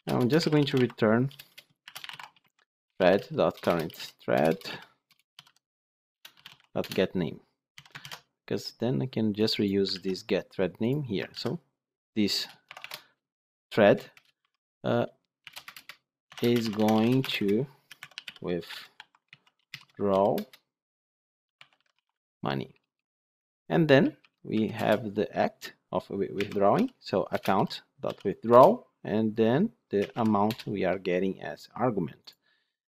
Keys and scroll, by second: 6.1 Return, 7.9 ctrl+alt+l, 9.8 ctrl+c, 11.2 ctrl+v, 27.3 Return.